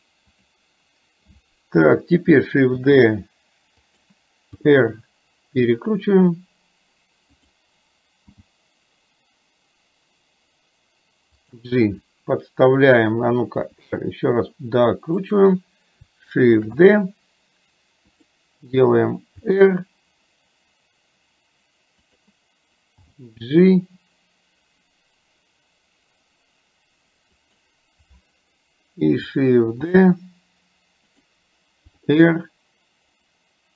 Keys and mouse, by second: 3.0 shift+d, 4.6 r, 8.5 g, 13.8 r, 16.7 shift+d, 19.6 r, 30.0 shift+d, 32.0 r.